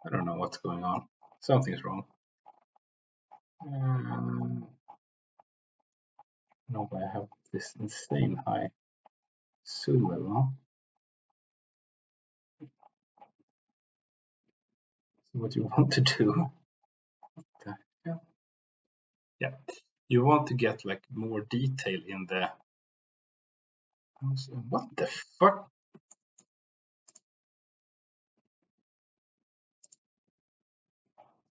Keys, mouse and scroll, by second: 25.1 Escape, 26.0 shift+middle click.